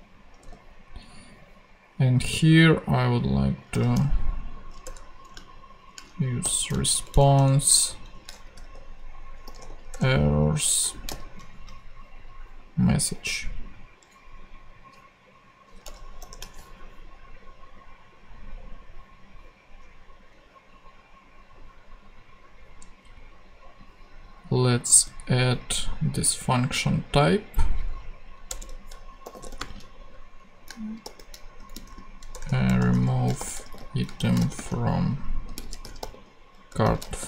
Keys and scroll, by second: 0.4 super+v, 3.5-4.3 typing, 4.8 Return, 6.4 alt+shift+., 6.8 alt+shift+Right, 8.4 alt+shift+e, 8.5 r, 9.6 o, 9.9 Return, 10.8 shift+Return, 10.9 shift+/, 11.1 shift+., 16.2 shift+super+p, 24.9 super+c, 28.5 Return, 29.0-30.0 typing, 31.0-37.2 typing.